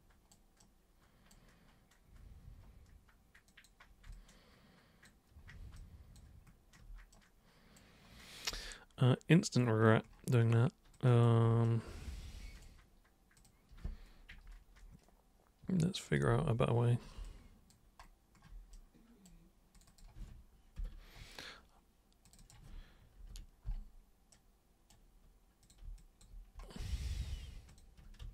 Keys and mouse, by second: 0.6 right click, 3.5 super+click, 4.1-5.0 alt+super+drag, 5.7 alt+super+click, 7.1 super+right click, 8.6-9.6 alt+super+drag, 11.0 alt+super+click, 11.7 super+right click, 13.4 super+click, 16.1 click, 17.3 alt+click, 18.7 right click, 19.8 click, 22.3 click, 24.3 super+right click, 25.6 super+click, 26.0 alt+super+click, 27.7 ctrl+shift+super+click, 28.2 ctrl+super+z.